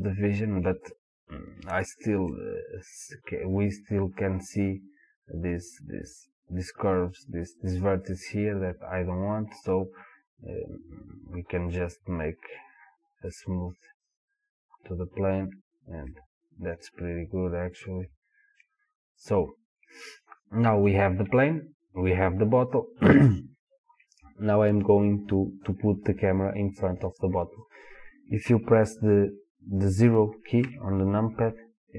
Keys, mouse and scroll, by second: 3.6-4.3 scroll up 2, 4.3-7.6 scroll up 1, 10.9-15.4 drag, 16.1-21.4 middle drag, 21.4-25.5 drag, 30.7 KP_0.